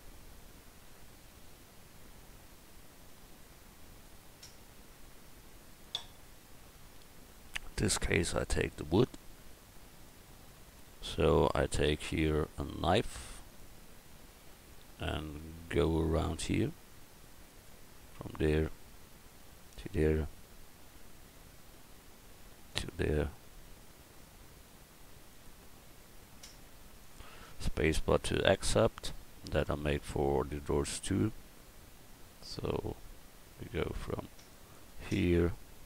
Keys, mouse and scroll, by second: 5.8-7.3 right drag, 7.3 Tab, 13.4-15.2 drag, 30.8-32.7 right drag.